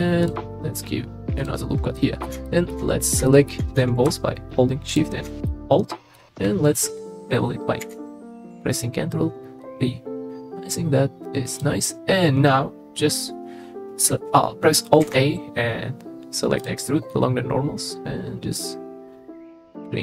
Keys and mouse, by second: 1.4 click, 2.0 middle click, 2.5 shift+middle click, 3.3 shift+middle click, 5.5 middle click, 7.8 ctrl+b, 15.0 alt+e.